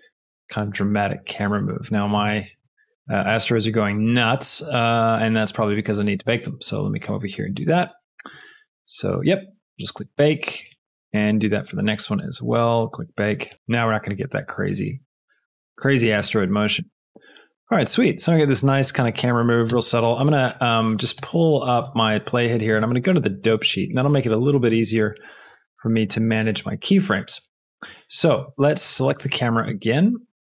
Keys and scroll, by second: 2.1 space, 13.5 space, 19.7 space.